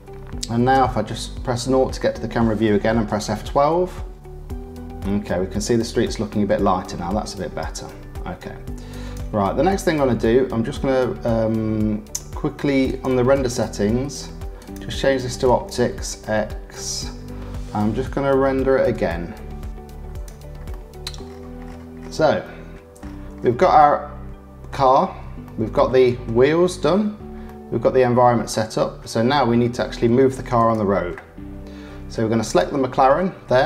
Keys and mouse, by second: 0.7 KP_0, 3.1 F12, 12.9 click, 13.3 click, 14.6-15.6 drag, 19.0 F12, 20.7 click, 21.1-22.4 middle drag, 22.4 click, 23.0 middle click, 23.8 click, 24.6-26.2 middle drag, 27.4 middle click, 28.3-29.3 drag, 30.6 click, 32.4 click.